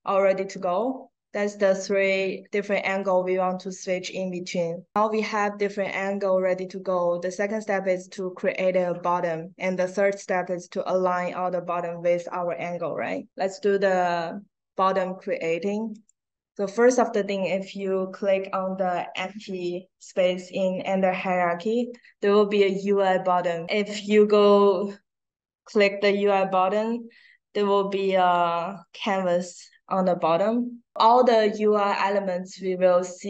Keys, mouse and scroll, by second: 0.6 click, 1.7 click, 15.8 right click, 17.7 right click.